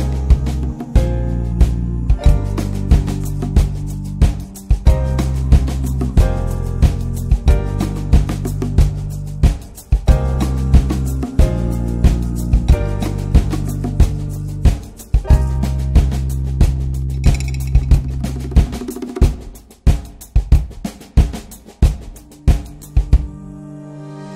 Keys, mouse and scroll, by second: 1.0 /, 1.6 scroll down 3, 1.8-2.4 middle drag, 2.4 click, 2.7 /, 3.0-5.7 middle drag, 5.7 /, 6.4 click, 7.0-7.5 middle drag, 7.5 click, 8.0-8.9 middle drag, 8.9 scroll up 1, 9.2 click, 9.6 scroll down 1, 10.4-13.8 drag, 13.8-14.4 middle drag, 14.4-15.8 drag, 15.8 scroll up 2, 16.1 middle click, 16.9-18.9 drag, 18.9 scroll down 1, 19.8-22.6 drag, 22.6 middle click, 23.4 scroll down 3, 24.1-24.3 drag.